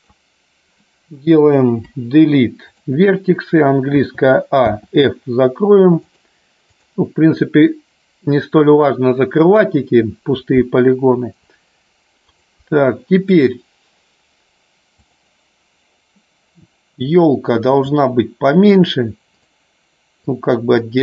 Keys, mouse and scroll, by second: 1.7 Delete, 3.8 a, 4.6 f, 6.0-6.8 drag, 12.3 click, 15.0 click, 20.3-21.0 drag.